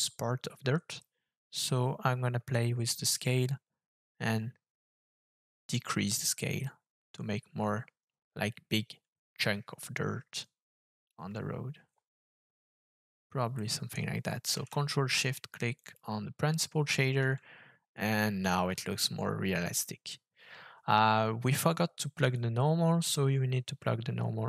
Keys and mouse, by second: 2.5-11.1 shift+drag, 13.6 middle click, 15.7 ctrl+shift+click, 22.3-24.4 drag.